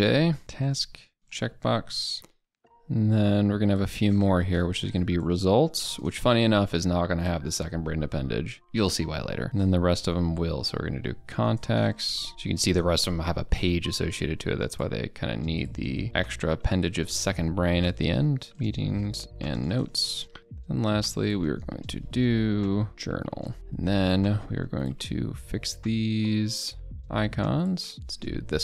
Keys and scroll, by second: 1.2 ctrl+BackSpace, 11.6 ctrl+BackSpace.